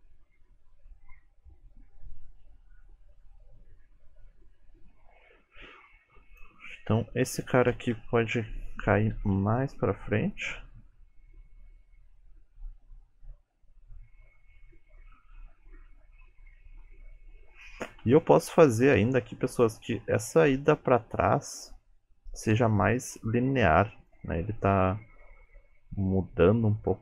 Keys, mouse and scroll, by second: 5.7 space, 6.4 click, 8.0 Right, 9.2 g, 10.5 space, 16.5-17.4 scroll down 2, 17.4-18.0 scroll up 2, 18.0 space, 18.5 shift+middle click, 19.7 click, 24.2 space.